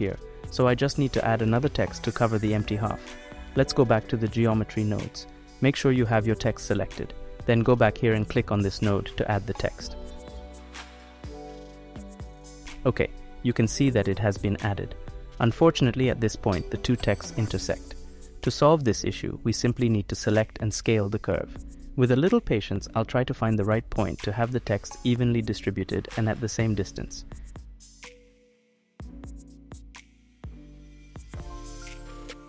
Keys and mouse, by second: 4.9 click, 6.0 click, 8.6-13.7 drag, 19.0 middle click, 19.3 click, 19.4 middle click, 23.1 s, 25.6-26.9 middle drag, 29.6 s.